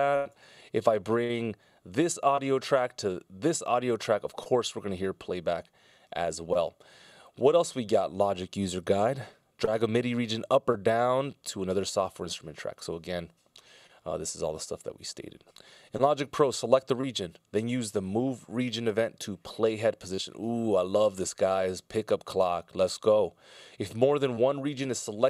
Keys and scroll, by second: 0.5 super+z.